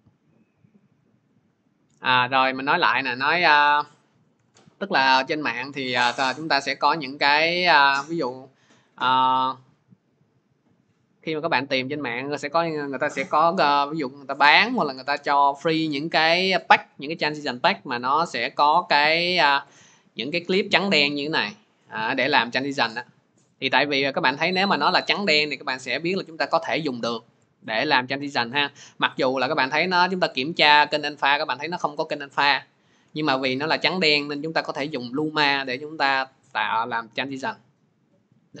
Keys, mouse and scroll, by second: 0.8 click, 3.6 click, 4.2 Delete, 5.8 click, 6.4 click, 7.5 click, 7.8 click, 29.0 click, 29.9 click, 30.8 click, 31.3 click, 33.9 click.